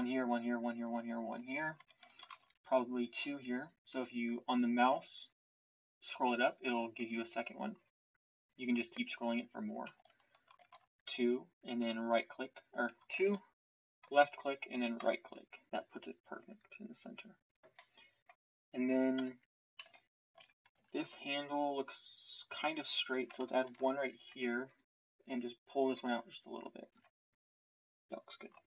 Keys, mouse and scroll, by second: 2.3 ctrl+r, 10.6 ctrl+r, 13.1 ctrl+r, 19.1 KP_1, 19.8 z, 20.3 z, 20.7 Tab, 22.6 Tab, 23.6 ctrl+r, 26.9 Tab.